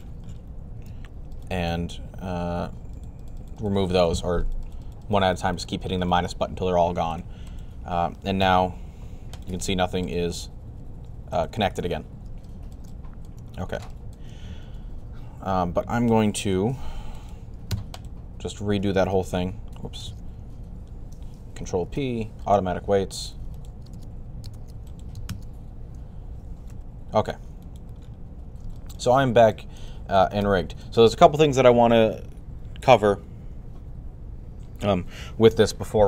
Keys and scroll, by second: 8.2 r, 16.1 typing, 21.7 ctrl+p, 26.5 r.